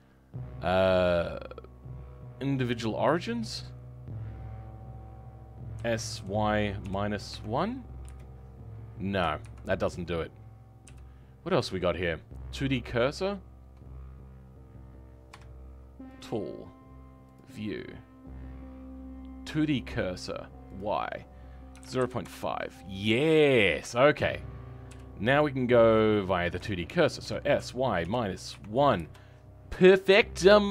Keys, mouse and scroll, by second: 5.8 s.